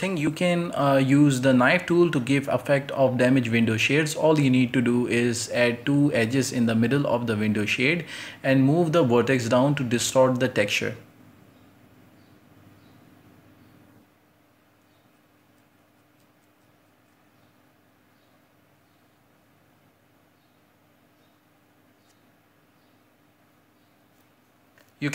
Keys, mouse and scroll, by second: 1.0 scroll up 2, 1.1 shift+middle click, 1.2 right click, 1.4-2.6 typing, 2.0-2.5 scroll up 2, 2.1 shift+middle click, 3.9-6.3 right drag, 6.3 ctrl+z, 6.6 right click, 7.2 click, 7.4 right click, 7.6 scroll down 2, 7.9 shift+right click, 8.3 ctrl+i, 8.3 h, 8.6 scroll up 2, 8.7 a, 8.8 a, 8.9 k, 12.1 right click, 12.6 click, 12.9 right click, 13.1 g, 13.7 g, 14.3 right click, 15.2 j, 15.8 k, 17.3 right click, 17.4 g, 18.8 right click, 18.9 g, 19.2 g, 19.4 scroll down 6, 19.6-20.3 scroll up 6, 20.3 k, 21.1 scroll up 1, 21.3 right click, 21.4 g, 21.9 j, 22.2 k, 23.1 right click, 23.3 g, 23.6 scroll down 6, 23.6 Tab, 23.8-24.8 shift+middle drag, 24.8 scroll up 1, 25.0 shift+middle click.